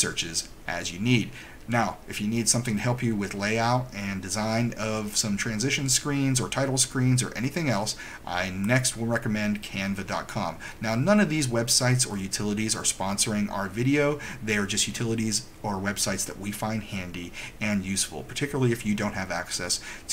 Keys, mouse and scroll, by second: 8.8 click.